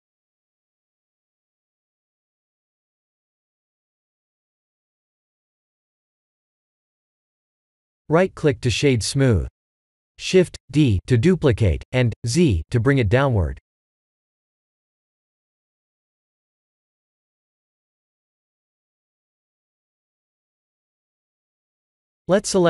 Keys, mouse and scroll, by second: 0.7 g, 5.1-5.5 scroll up 6, 5.5 middle click, 8.6 click, 9.0 right click, 10.1 click, 10.5 right click, 12.0 KP_1, 12.0 KP_2, 12.1 KP_1, 13.4 click, 14.0 shift+middle click, 14.5 shift+d, 17.2 shift+middle click, 18.5 shift+d, 21.9 click, 22.2 middle click.